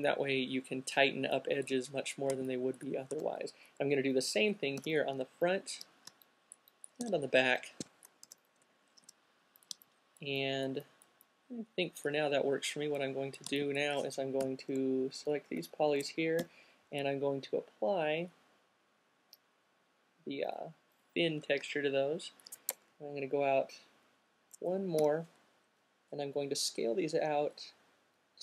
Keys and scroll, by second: 3.9 alt+c, 7.1-7.9 typing, 9.3 q, 10.7 typing, 15.4 Up, 15.8 Up, 16.7 m, 21.7 alt+shift+q, 23.4 Up, 25.3 r.